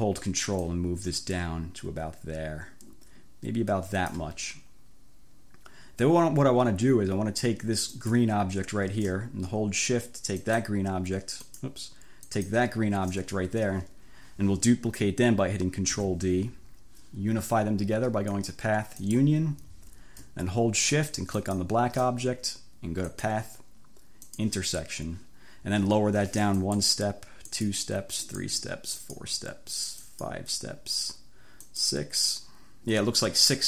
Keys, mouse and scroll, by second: 0.7-4.4 ctrl+drag, 8.0 click, 10.4 shift+click, 11.5 shift+click, 12.3 shift+click, 16.0 ctrl+d, 18.4 click, 19.1 click, 21.4 shift+click, 23.2 click, 24.3 click, 26.7 click, 27.5 click, 28.4 click, 29.0 click, 30.0 click, 31.8 click.